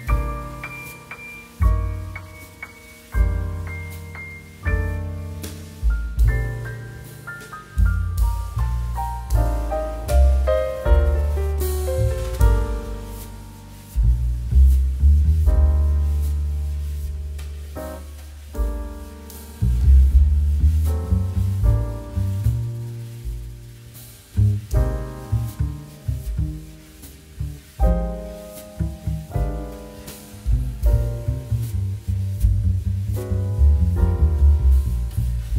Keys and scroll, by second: 7.0 Return, 25.2 [, 29.7 space.